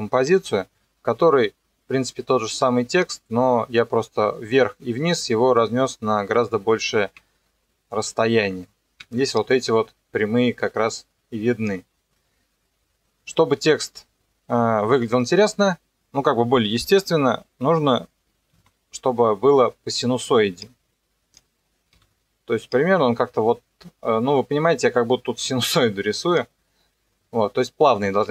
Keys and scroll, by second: 9.0 ctrl+2, 18.6 r, 22.0 g.